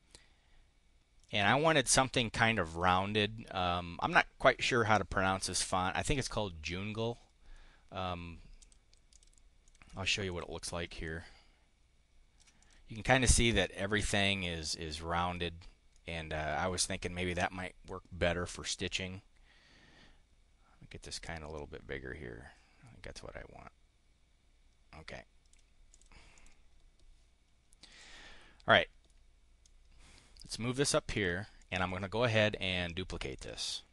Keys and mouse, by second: 2.6 click, 8.5 click, 9.1 click, 9.3 click, 10.0 click, 10.9-12.4 ctrl+drag, 12.5 click, 15.8 click, 17.3 click, 18.6-25.5 drag, 25.8 click, 26.2 click, 27.7 click, 28.6 click, 29.4-30.9 drag, 31.0 click, 31.5 click, 33.3 click.